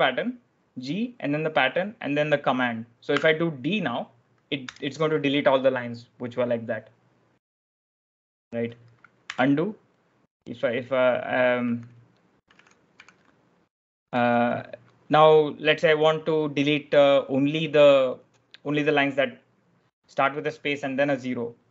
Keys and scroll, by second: 3.0 d, 4.6 Return, 9.1 u, 11.5-14.0 typing.